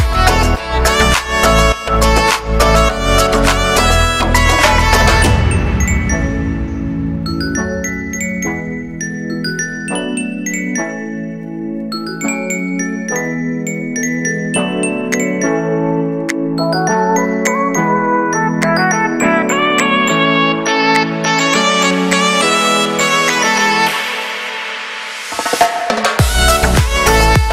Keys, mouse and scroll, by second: 0.8 scroll down 2, 0.9 shift+middle click, 1.4-1.9 scroll down 2, 1.9 ctrl+r, 2.4 ctrl+r, 2.8 middle click, 3.1 alt+shift+right click, 3.2 shift+middle click, 3.6 ctrl+b, 5.1 middle click, 5.4 ctrl+r, 5.9 ctrl+r, 6.4 alt+shift+right click, 6.8 ctrl+b, 8.9 shift+middle click, 9.6 alt+shift+right click, 10.3 middle click, 10.5 scroll up 1, 10.6 s, 13.1 middle click, 13.4-13.9 scroll down 2, 13.9 ctrl+r, 15.1 ctrl+r, 16.1 middle click, 16.7 alt+shift+right click, 17.2 scroll up 1, 17.4 ctrl+b, 21.0 middle click, 21.5 click, 21.6 a, 21.7 a, 23.7 shift+middle click, 24.0-24.5 scroll up 2, 24.2 shift+middle click, 24.5 e, 26.4-27.4 scroll down 2, 26.5 shift+middle click, 27.4 shift+middle click.